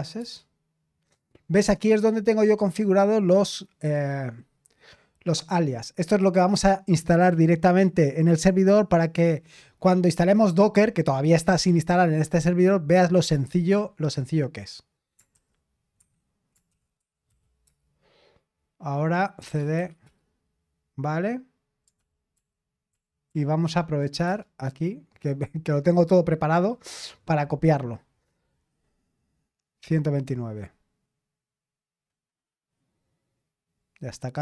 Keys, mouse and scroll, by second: 0.0-3.2 typing, 15.4 shift+;, 16.0 Escape, 16.6-17.8 typing, 19.1-20.1 typing, 22.0 ctrl+p, 22.3 ctrl+p, 22.4-24.5 typing, 23.3 ctrl+p.